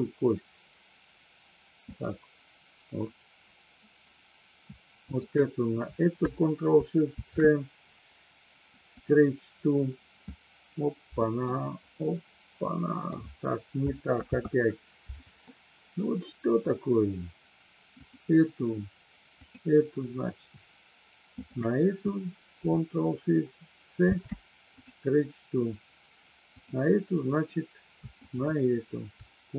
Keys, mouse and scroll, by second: 1.8-3.0 drag, 5.0-6.2 shift+drag, 7.0 ctrl+shift+c, 11.4-13.1 middle drag, 14.1 ctrl+z, 15.5 middle click, 19.5-20.5 drag, 24.0 ctrl+shift+c, 28.2-29.2 shift+drag.